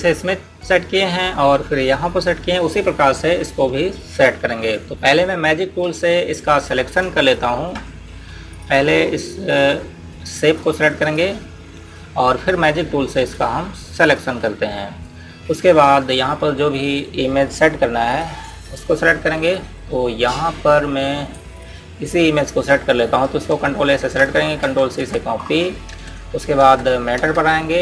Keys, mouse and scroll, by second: 7.4 click, 19.1 click, 24.9 ctrl+a, 25.5 ctrl+c, 26.6 ctrl+Tab.